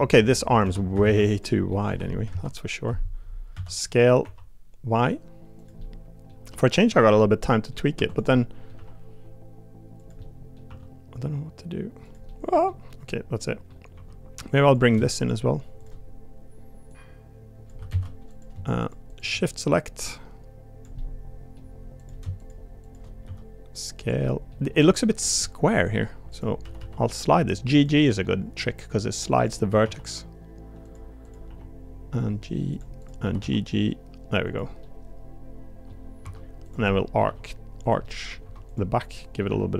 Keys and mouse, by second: 0.6 3, 1.0 alt+z, 1.3 click, 1.7 middle click, 3.5 s, 5.8 middle click, 6.4 g, 7.4 middle click, 7.9 3, 8.3 middle click, 8.7 g, 10.2 middle click, 10.6 r, 12.2 middle click, 12.9 middle click, 13.9 1, 15.2 shift+click, 15.8 shift+click, 16.9 click, 17.9 ctrl+z, 18.3 click, 18.8 shift+click, 19.1 shift+click, 19.7-20.8 drag, 21.0 middle click, 22.0 click, 22.4 shift+click, 23.2 s, 24.2 middle click, 24.6 g, 25.4 middle click, 26.3 click, 26.6 g, 28.2 middle click, 29.4 click, 29.7 g, 31.5 g, 33.0 click, 34.8-35.9 middle drag, 36.2 2, 36.6 click, 36.9 middle click, 37.2 g, 38.0 middle click, 38.4 2, 39.2 middle click, 39.5 g.